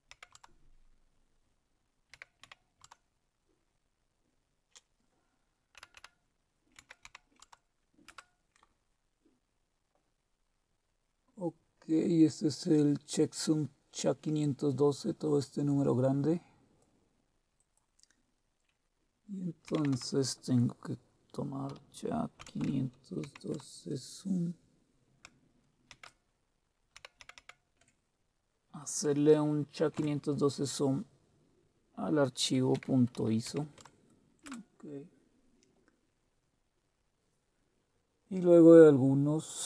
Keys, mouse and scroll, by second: 0.0-2.9 typing, 0.3 Tab, 5.7-7.9 typing, 8.1 Return, 14.4-18.6 drag, 19.4-20.4 typing, 21.7-23.7 typing, 25.6-27.9 typing, 29.9 Tab, 32.3-34.4 typing.